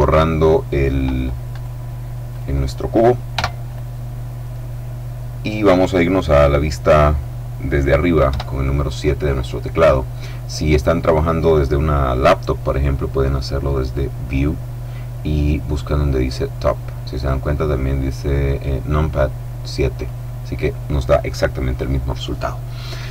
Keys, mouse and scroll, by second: 1.6 right click, 2.4 right click, 3.4 x, 3.7 click, 8.3 KP_7, 13.8 click, 20.0 click.